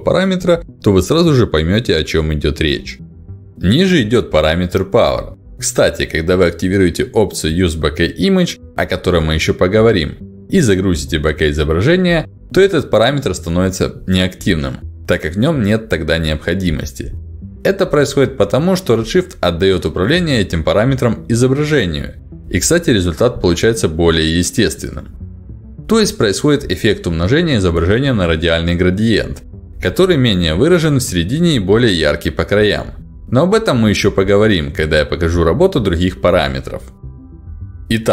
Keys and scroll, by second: 0.6 5, 0.8 Return, 7.7 ctrl+alt+d, 16.9 ctrl+alt+d.